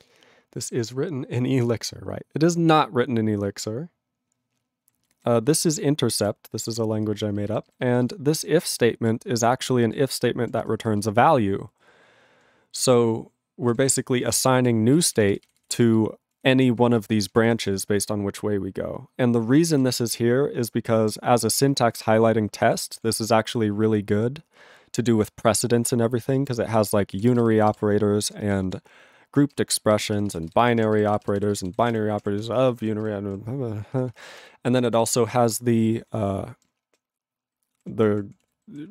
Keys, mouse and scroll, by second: 4.8 ctrl+n, 6.1 ctrl+n, 6.7 ctrl+p, 6.8 ctrl+e, 7.1 ctrl+space, 7.6 ctrl+alt+b, 8.1 ctrl+g, 8.2 ctrl+p, 8.7 ctrl+p, 8.9 ctrl+p, 9.4 ctrl+n, 9.9 ctrl+alt+f, 10.6 ctrl+f, 10.8 ctrl+space, 11.2 ctrl+alt+f, 13.7 ctrl+g, 13.9 ctrl+a, 14.2 ctrl+space, 14.7 ctrl+alt+f, 15.0 ctrl+g, 15.7 ctrl+space, 16.3 ctrl+alt+f, 18.3 ctrl+alt+f, 20.0 ctrl+g, 20.1 ctrl+p, 20.6 ctrl+p, 21.3 ctrl+a, 21.5 ctrl+n, 21.6 ctrl+space, 21.7 ctrl+n, 22.5 ctrl+n, 22.9 ctrl+p, 23.2 ctrl+g, 23.3 ctrl+p, 24.1 ctrl+p, 26.1 ctrl+e, 26.3 ctrl+space, 26.7 ctrl+alt+b, 27.1 ctrl+g, 27.3 ctrl+space, 27.4 ctrl+f, 27.7 ctrl+g, 28.3 ctrl+space, 28.8 ctrl+alt+f, 29.5 ctrl+g, 29.7 ctrl+b, 30.4 ctrl+space, 30.5 ctrl+b, 30.8 ctrl+g, 30.9 ctrl+b, 31.9 ctrl+space, 31.9 ctrl+f, 32.2 ctrl+g, 32.4 ctrl+f, 32.6 ctrl+space, 32.9 ctrl+f, 33.0 ctrl+g, 33.2 ctrl+p, 33.9 ctrl+f, 34.4 ctrl+b, 35.9 ctrl+n, 36.5 ctrl+p, 37.5 ctrl+n, 37.8 ctrl+a, 37.9 ctrl+p, 38.4 ctrl+e, 38.6 ctrl+n, 38.8 ctrl+p.